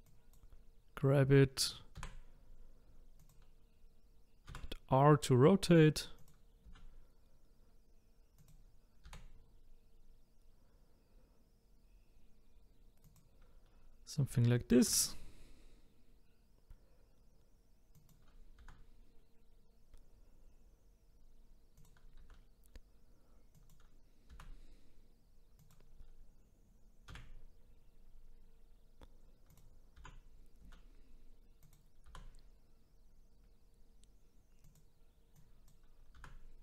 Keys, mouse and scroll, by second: 0.0 click, 2.0 g, 4.5 r, 6.7 s, 9.0 g, 14.9 e, 18.6 r, 22.2 s, 24.3 g, 27.1 e, 30.0 r, 32.0 g, 35.4 click, 36.2 r.